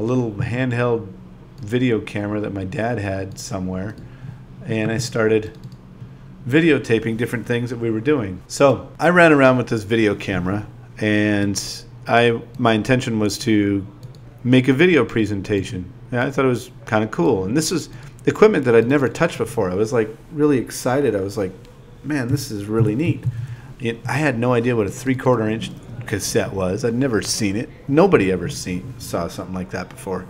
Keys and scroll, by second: 0.1 BackSpace, 1.5 3, 1.8 shift+e, 2.8 super+v, 4.5 2, 5.7 0, 7.8 8, 8.6 ., 12.6-16.3 typing, 17.3 ., 19.3 BackSpace, 21.0 super+v, 23.1-25.3 typing, 27.5 ,, 28.4 BackSpace.